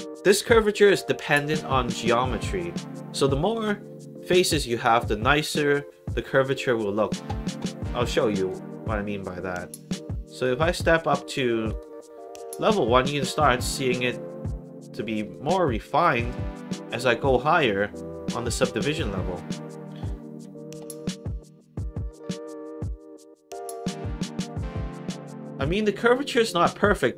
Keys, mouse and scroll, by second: 8.3 click, 10.3 click, 11.6 click, 15.1 click, 15.9 click, 17.5 click, 18.5 click, 21.6 click, 22.8 alt+click, 24.1 alt+middle click, 24.6 alt+right click, 25.3 alt+click, 25.8 alt+right click, 26.4 alt+click.